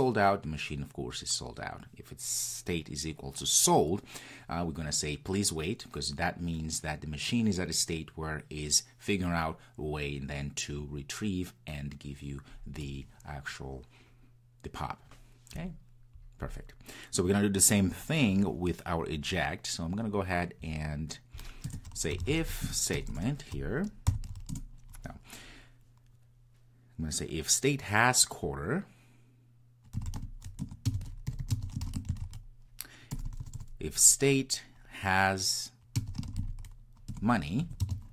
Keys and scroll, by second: 24.5 Return, 30.6 Return, 37.1 Return.